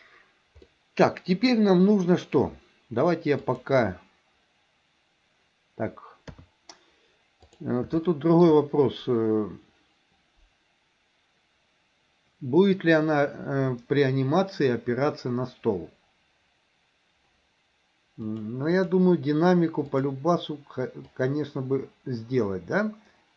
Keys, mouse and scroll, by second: 0.7-2.4 middle drag, 3.5-5.5 drag, 6.3 KP_3, 7.4 click, 8.1 shift+middle click, 18.3-19.1 drag, 20.0 click, 21.3-23.3 drag.